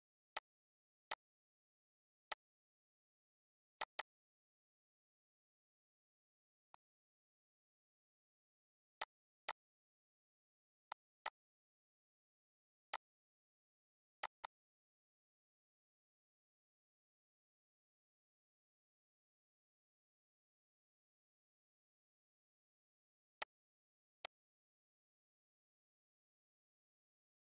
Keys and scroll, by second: 24.0 ctrl+s.